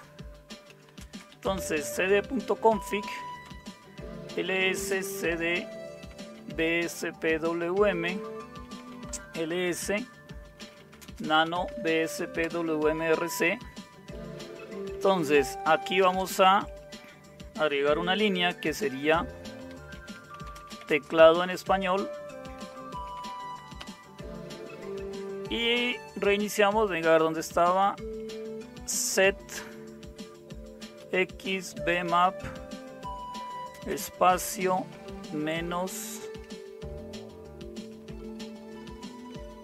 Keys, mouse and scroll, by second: 0.5-9.3 typing, 2.6 Return, 10.4-12.4 typing, 14.0-14.7 typing, 14.8 Down, 14.9 Down, 15.1-16.0 Down, 15.9-23.8 typing, 28.4-29.6 typing, 31.0-33.7 typing, 34.9 typing, 36.0-39.6 typing.